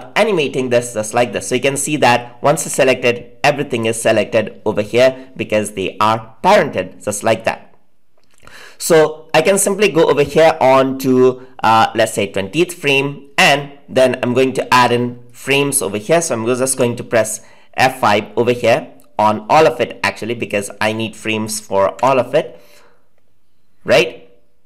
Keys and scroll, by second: 16.6 F5, 21.9 F5.